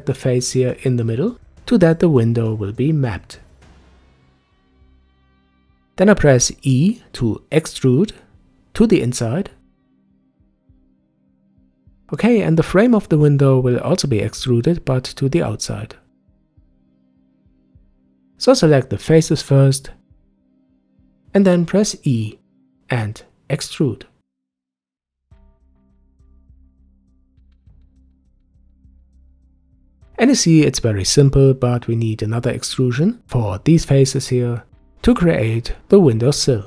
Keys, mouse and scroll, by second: 0.9 click, 1.4-4.5 middle drag, 5.5 e, 12.4-15.4 middle drag, 15.6-18.6 drag, 19.7-21.3 ctrl+drag, 21.5-23.4 middle drag, 23.4 e, 28.8-30.1 middle drag, 30.1-31.1 drag, 31.7 shift+click, 32.3-34.2 middle drag, 34.2 e.